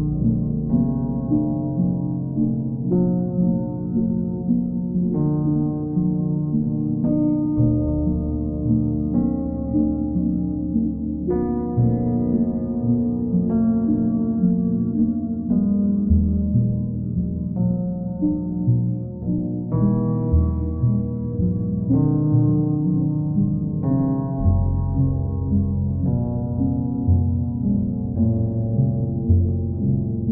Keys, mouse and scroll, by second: 2.3-3.3 drag, 3.7-4.8 drag, 6.3 click, 8.1 click, 11.1 click, 11.7 click, 14.2 click, 15.6-16.6 drag, 16.8-17.8 drag, 18.3-19.4 drag, 20.2-21.2 drag, 21.7 click, 24.5 click, 24.9 shift+click, 25.5 alt+click, 26.8 click, 27.5 click, 28.0 alt+click, 30.0 click.